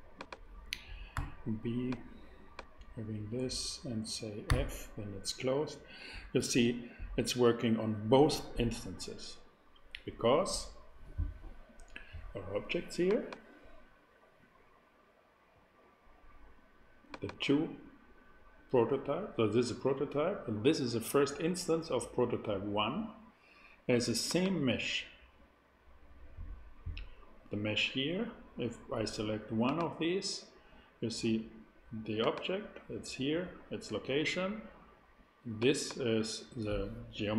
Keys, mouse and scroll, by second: 0.1-2.1 drag, 1.1 b, 1.2 b, 4.5 f, 13.0-15.9 drag, 17.1-19.8 drag, 24.2-28.0 drag, 29.6-31.8 drag, 32.2-34.8 drag, 35.5-37.3 drag.